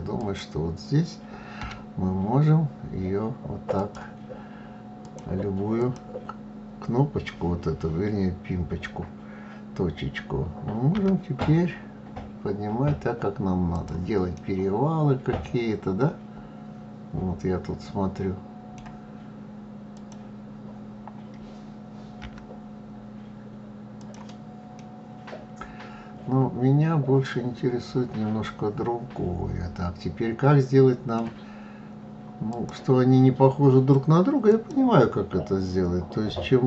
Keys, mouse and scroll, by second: 4.4 click, 5.2 click, 13.7-16.8 middle drag, 19.3 click, 21.6 g, 24.1-27.2 middle drag, 31.8 click, 33.9 click, 36.4 g.